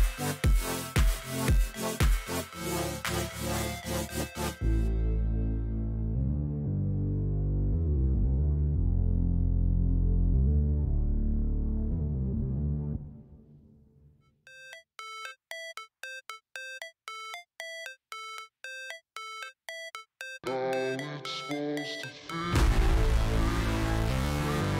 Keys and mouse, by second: 0.2 click, 1.5-2.6 drag, 4.2 click, 6.2 click, 7.7 click, 8.4 click, 9.3 click, 10.2 click, 12.0 click, 13.3-14.7 drag, 15.1-16.9 drag, 17.7 click, 18.8 click, 20.1 alt+click, 21.4 click, 23.3 alt+click, 24.6 click.